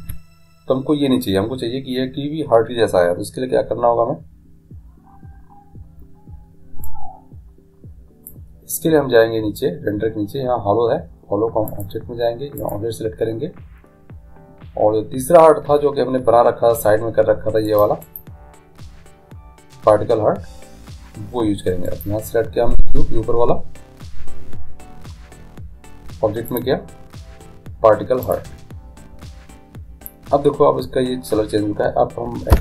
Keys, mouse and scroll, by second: 6.9-8.7 drag, 11.7-14.3 drag, 18.0-19.8 right drag, 21.9-23.8 right drag, 26.5-28.7 drag.